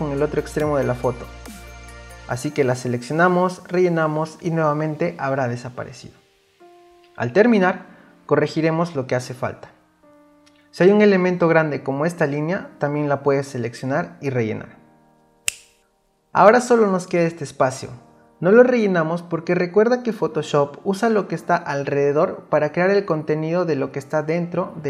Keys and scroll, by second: 9.2 ctrl+d, 12.7 space, 15.5 ctrl+d.